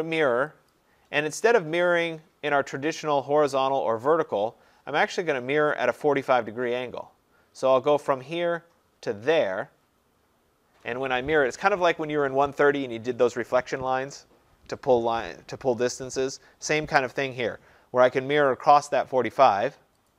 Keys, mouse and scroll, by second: 0.8 click, 8.2 click, 18.7 click.